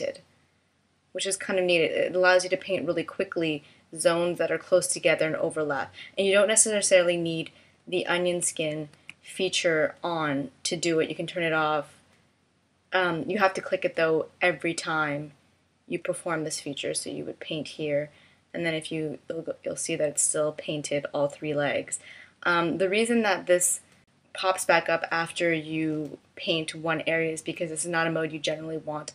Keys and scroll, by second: 8.1 super+z.